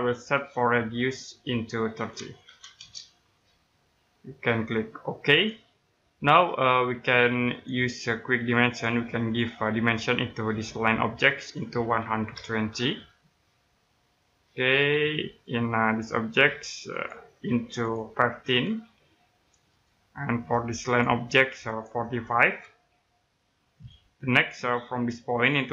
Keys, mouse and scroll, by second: 2.0-2.4 typing, 2.7 Return, 5.3 click, 5.9-6.3 scroll down 1, 6.3 middle click, 7.5 click, 11.9-12.7 typing, 13.8 click, 14.7 scroll down 1, 14.9 middle click, 15.4-16.9 scroll down 1, 16.9 click, 18.4-18.8 typing, 19.6 click, 22.1-22.8 typing, 23.7 click.